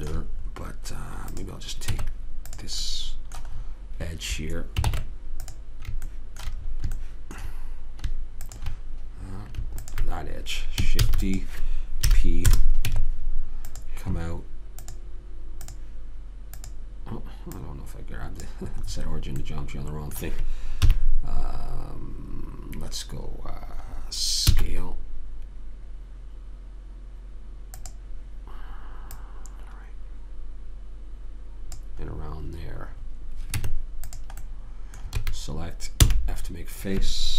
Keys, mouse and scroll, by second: 1.7 right click, 2.2 Tab, 5.2 ctrl+Tab, 8.8-11.4 drag, 11.4 shift+d, 12.4 p, 13.2 Tab, 15.2 click, 21.1 KP_3, 24.8 s, 29.5 click, 32.4 middle click, 33.9 Tab, 35.5 a, 36.4 f.